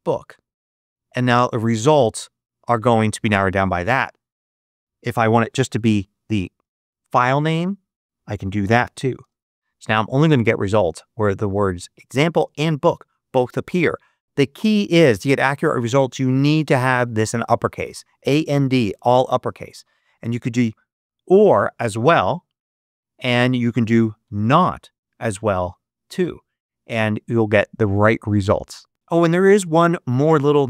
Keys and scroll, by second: 5.2-7.1 typing, 8.3-9.6 typing, 20.8 shift+o, 23.9 shift+n, 24.2 shift+t.